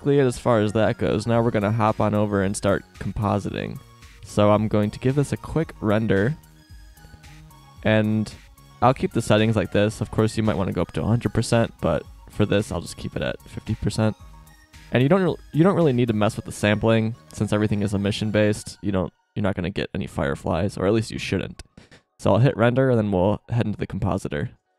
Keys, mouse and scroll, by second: 4.2 z, 6.4-7.7 drag, 7.7 middle click, 15.8-17.4 middle drag, 17.4 drag, 20.1 click, 24.6 click.